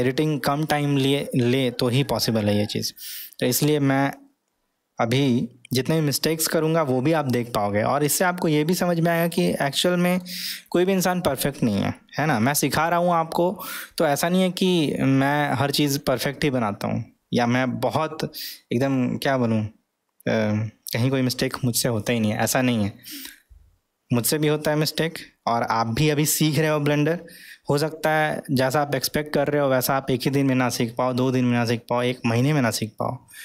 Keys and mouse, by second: 3.9-10.3 middle drag, 12.0-12.6 middle drag, 12.8-15.7 middle drag.